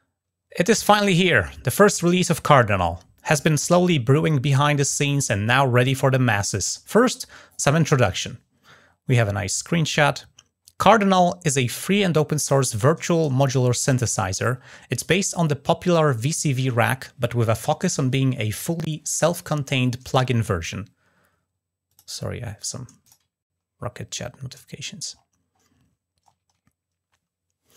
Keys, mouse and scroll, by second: 8.0-9.0 scroll down 4, 9.5-10.2 scroll down 1, 11.1-12.3 scroll down 2, 12.6-13.0 scroll down 2, 21.7 click, 22.8 drag, 23.2-26.0 scroll up 6.